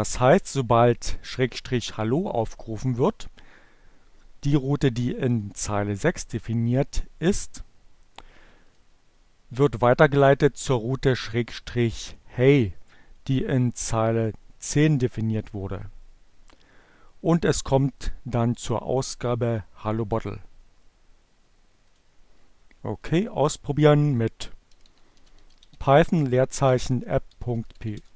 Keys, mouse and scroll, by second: 0.3-1.9 drag, 4.7 click, 7.3-8.6 drag, 9.5-12.7 drag, 14.4 click, 18.2-19.6 drag, 19.7-21.9 drag, 22.4 click, 23.4 p, 24.5-27.9 typing.